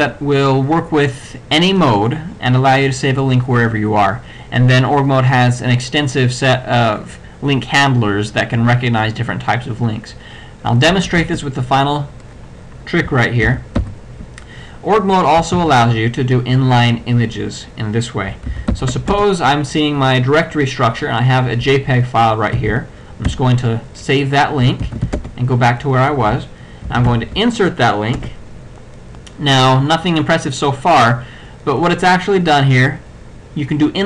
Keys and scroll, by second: 10.9 Return, 13.5 ctrl+x, 13.8 ctrl+d, 15.6 ctrl+g, 18.5 ctrl+x, 18.8 ctrl+d, 19.1 ctrl+Return, 22.6 ctrl+c, 24.9 ctrl+x, 25.1 ctrl+b, 25.2 ctrl+Return, 26.9 c, 27.2 l, 28.2 Return.